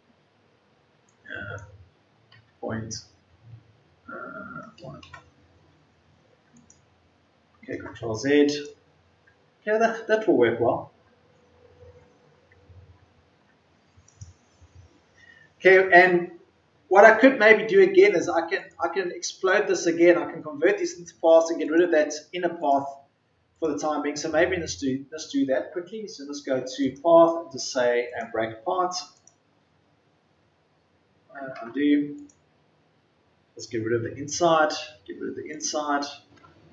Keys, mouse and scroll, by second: 2.2 KP_Decimal, 2.9 KP_0, 30.3 Delete, 31.5 ctrl+z, 33.7 Delete.